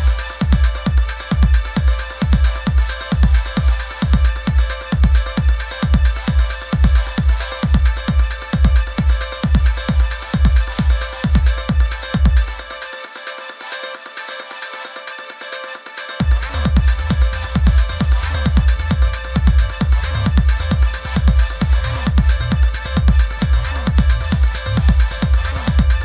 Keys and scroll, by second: 4.6 super+-, 8.1 super+g, 9.0 super+c, 9.4 super+f, 10.0 shift+Right.